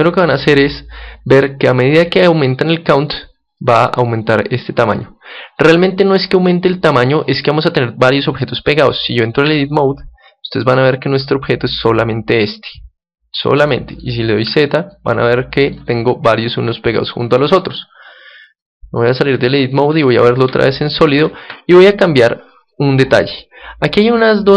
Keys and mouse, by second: 3.0-9.4 drag, 9.4 Tab, 10.6-14.2 middle drag, 14.4 z, 14.8-20.4 middle drag, 19.2 Tab, 19.9 z, 20.7-22.4 middle drag, 22.5-24.5 middle drag.